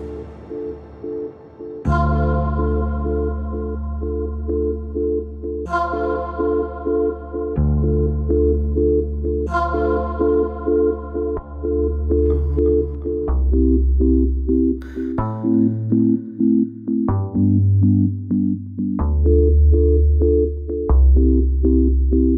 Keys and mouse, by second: 0.2 ctrl+b.